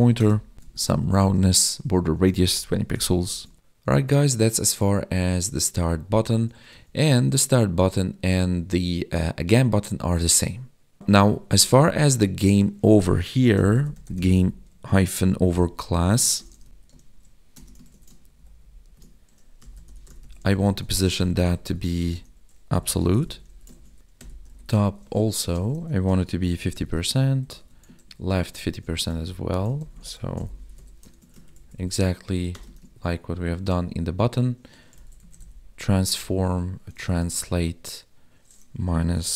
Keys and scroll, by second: 1.0 Tab, 3.4 ctrl+s, 17.9 ctrl+s, 18.2 ctrl+Down, 21.0 space, 23.8 ctrl+s, 25.4 space, 27.5 alt+shift+Down, 28.1 ctrl+s, 28.6 ctrl+Left, 29.9 ctrl+shift+Left, 31.2 ctrl+s, 31.5 ctrl+Right, 32.8 ctrl+s, 36.5 Tab, 37.6 Tab.